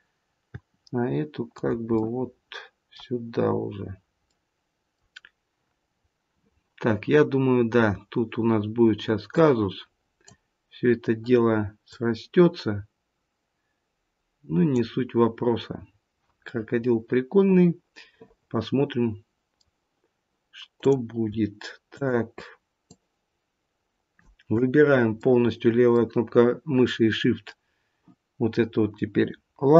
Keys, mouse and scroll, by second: 0.5 g, 1.9 middle click, 3.4-4.2 scroll down 1, 4.2 middle click, 5.7-6.1 scroll up 2, 9.3 click, 11.8 click, 15.6 scroll down 4, 16.4 middle click, 20.7 click, 21.8 shift+click, 25.1 middle click, 27.2-28.1 scroll up 1.